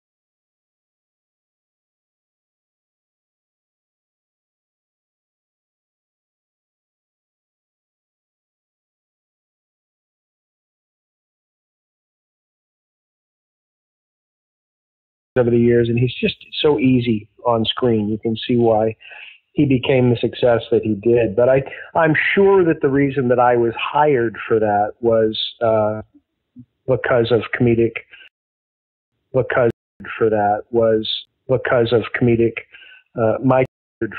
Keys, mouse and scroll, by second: 1.3 click, 1.4 click, 2.8 ctrl+s, 3.4 space, 15.2 click, 15.3 space, 17.3-18.4 drag, 18.8 click, 20.0 click, 20.7 click, 21.3 click, 22.1 click, 22.8 ctrl+s, 27.5 click, 28.2 space, 28.9 ctrl+shift+Delete, 29.0 space, 29.6 space, 29.8 click, 29.9 space, 33.6 space, 33.9 click, 33.9 space.